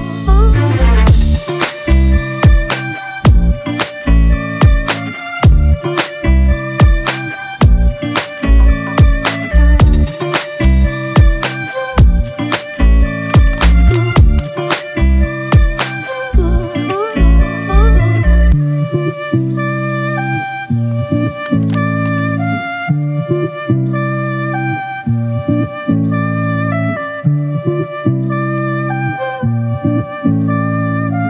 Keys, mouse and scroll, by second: 7.1 double click, 17.1 right click.